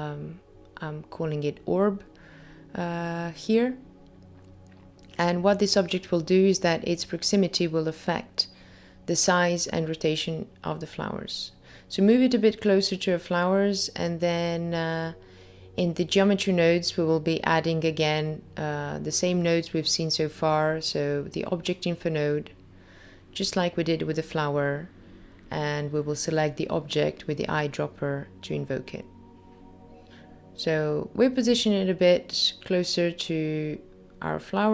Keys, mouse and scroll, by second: 0.4 click, 1.1 click, 4.5-5.4 scroll up 1, 6.8 middle click, 9.5 click, 9.7 g, 16.0 click, 17.5-18.4 scroll up 2, 18.4 middle click, 18.4 scroll up 2, 21.3 click, 23.1 click, 30.5 middle click, 32.8-33.3 scroll up 3, 33.8 middle click.